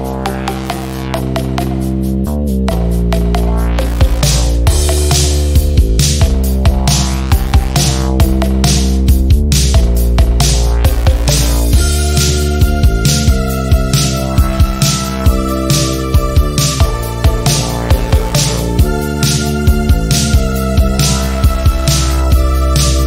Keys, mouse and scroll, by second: 1.6 v, 2.0 click, 4.5 click, 5.9 ctrl+e, 6.4 click, 7.7 ctrl+d, 9.3 F10, 9.8-11.7 drag, 18.3 v, 19.4 Return, 20.6 click, 21.1 click, 21.8 ctrl+z, 22.5 shift+click, 22.6 shift+click.